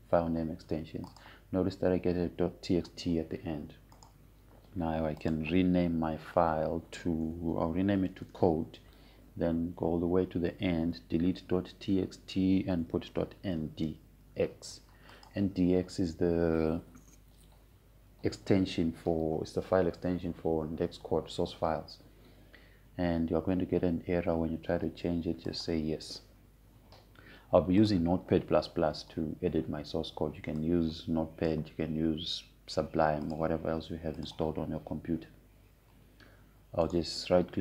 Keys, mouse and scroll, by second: 0.5-1.8 typing, 1.3 click, 5.6 right click, 6.9 click, 9.3-10.5 typing, 11.5 Right, 13.2 BackSpace, 14.8-15.9 typing, 16.8 click, 27.2 click, 32.3-34.9 drag.